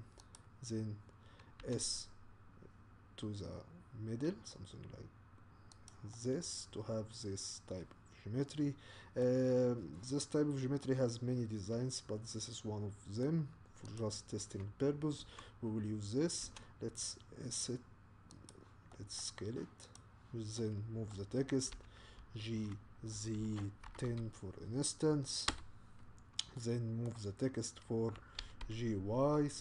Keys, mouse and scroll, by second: 1.6 s, 6.1-9.2 middle drag, 9.9-10.8 scroll down 2, 10.8-14.0 middle drag, 14.0 click, 15.2 Tab, 16.4 s, 18.9-19.9 middle drag, 19.9 click, 20.7-21.7 middle drag, 21.7 g, 26.6-28.4 middle drag, 28.4 g.